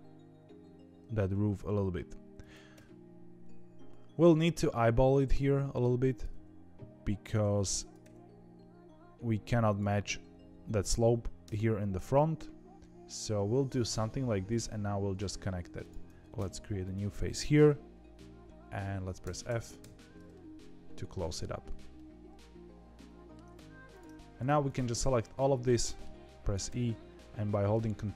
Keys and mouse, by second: 2.7 e, 7.9 e, 11.4 KP_3, 14.0 middle click, 16.3 f, 16.8 click, 19.2 f, 19.7 f, 20.3-21.6 middle drag, 21.9-23.3 middle drag, 25.1 shift+middle click, 25.8 middle click, 26.6 e.